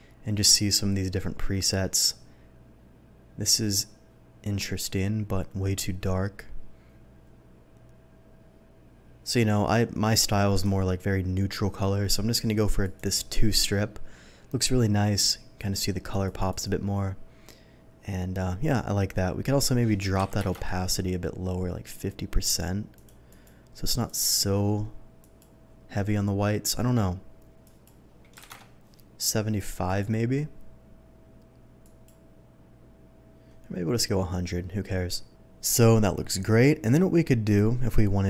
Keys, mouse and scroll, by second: 1.0-1.5 scroll down 1, 1.9-6.2 scroll up 1, 6.2-7.7 scroll down 1, 7.7-8.5 scroll down 1, 8.5-10.5 scroll down 1, 10.5 click, 12.8 click, 15.1 click, 15.6 click, 16.1 click, 16.5 click, 19.4 click, 20.2 KP_5, 20.4 KP_0, 20.6 Return, 22.9 click, 23.3 click, 23.8 click, 24.0 click, 25.2 click, 27.6 click, 28.4 KP_5, 28.6 Return, 29.5 click, 29.8 click, 31.8 click, 36.8 click, 37.4 click.